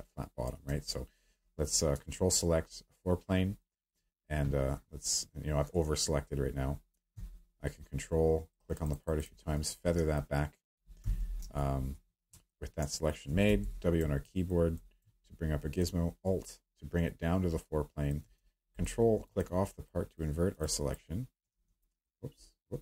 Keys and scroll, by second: 11.0 s, 11.4 a, 12.0 Escape, 13.4 w, 21.5 ctrl+z.